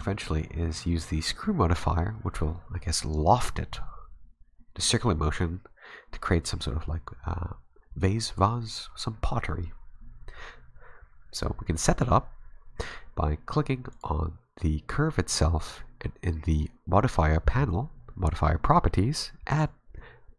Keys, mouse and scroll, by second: 13.9 right click, 19.5 click.